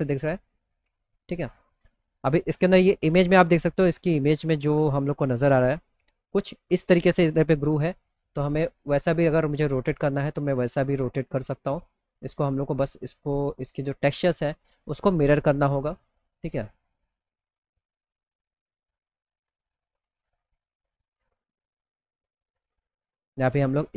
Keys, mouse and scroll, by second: 7.2 click, 8.4 click, 9.4 click, 9.9 middle click, 10.4 middle click, 10.7 middle click, 12.2 click, 13.5 click, 18.5 click.